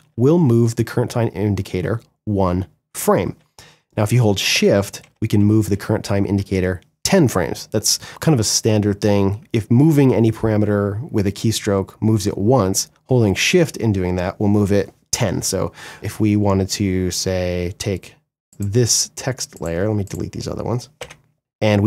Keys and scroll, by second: 3.6 shift+Page_Up, 20.1 Delete, 21.6 Right.